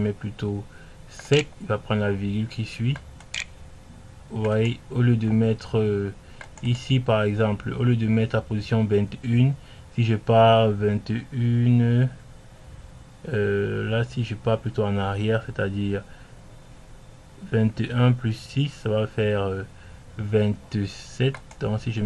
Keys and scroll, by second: 0.4-1.5 typing, 3.2 Return.